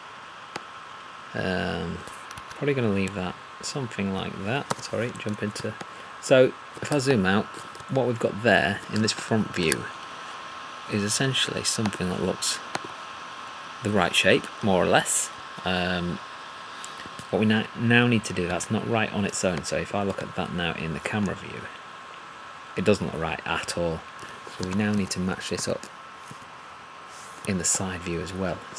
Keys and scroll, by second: 2.3 1, 4.7 3, 18.5 1, 24.6 2, 25.0 3, 25.6 4, 26.3 5.